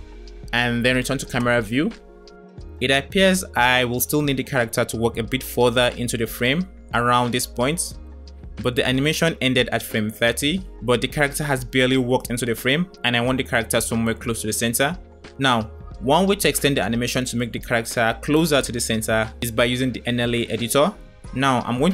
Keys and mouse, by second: 0.0 space, 0.5 KP_0, 1.8 space, 2.0 Right, 2.0 KP_0, 2.2 Right, 2.6 Right, 3.0 Right, 3.2 Right, 3.4 Right, 3.7 Right, 4.0 Right, 4.4 Right, 5.0 Right.